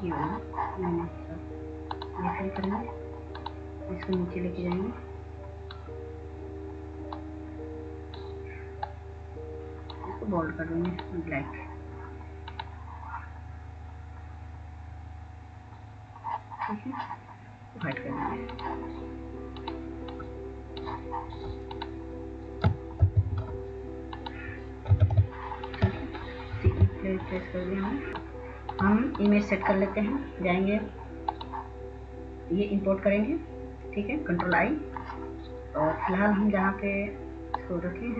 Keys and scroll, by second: 24.3 ctrl+g, 25.9-26.8 typing, 27.9 F4, 28.1-28.8 typing.